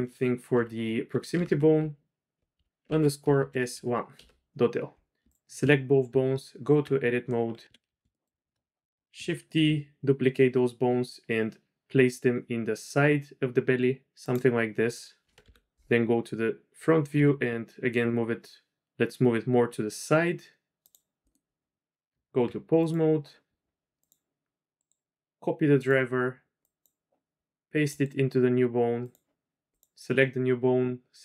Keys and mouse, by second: 0.5 F2, 1.4 Left, 6.0 Tab, 7.6 KP_3, 8.2 shift+middle click, 9.5 shift+d, 15.4 KP_1, 17.1 g, 21.2 middle click, 22.1 Tab, 23.9 click, 24.8-25.8 drag, 26.7 click, 27.9-29.8 drag.